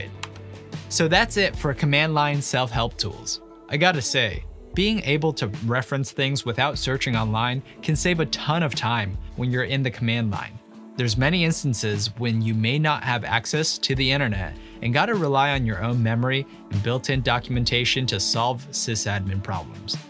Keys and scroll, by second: 0.2 q.